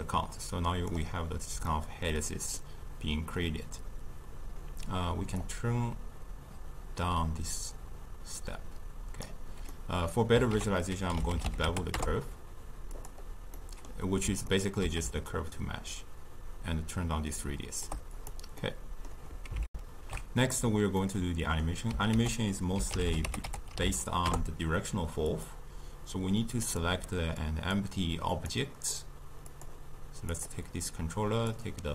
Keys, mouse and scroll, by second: 1.8-5.7 middle drag, 5.7-8.6 drag, 13.1 ctrl+a, 15.5-18.4 shift+drag, 18.8 middle click, 19.7 ctrl+alt+shift+q, 21.0-22.1 middle drag, 22.1 ctrl+a, 26.7 click, 27.4-28.5 drag, 29.5 click, 31.5-31.9 drag.